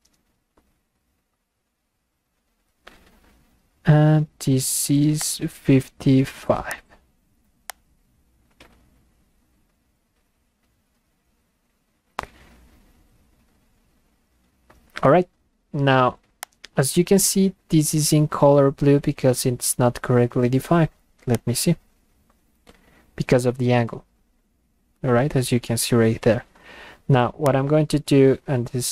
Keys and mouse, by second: 0.4 Return, 5.2 click, 6.7 click, 7.7 click, 11.3 Return, 16.4 click, 21.3-26.6 drag, 27.5 click.